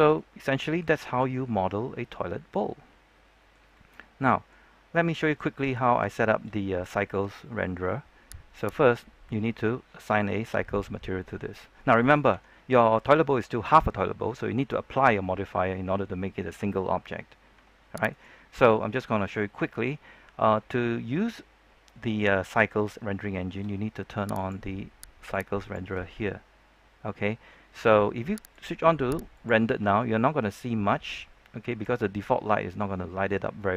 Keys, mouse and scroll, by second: 0.1-3.6 shift+middle drag, 4.0 scroll down 1, 4.2 middle click, 4.7 scroll down 1, 4.8 middle click, 5.4 shift+middle click, 5.7 scroll up 1, 6.1 shift+middle click, 6.5-6.8 scroll up 1, 6.9 shift+middle click, 8.2 scroll down 1, 8.5 right click, 12.2 Tab, 14.2-17.5 scroll up 1, 17.5 Tab, 18.0 right click, 23.0 shift+middle click, 24.3 click.